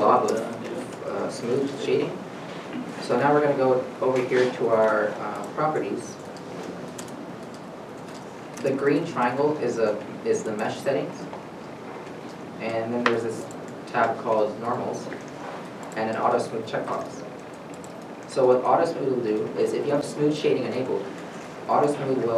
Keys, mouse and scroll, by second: 1.7-3.7 scroll down 1, 15.2-15.5 scroll down 1, 17.8 shift+middle click, 18.2 scroll up 1, 18.5-19.0 shift+scroll, 19.0 scroll down 1.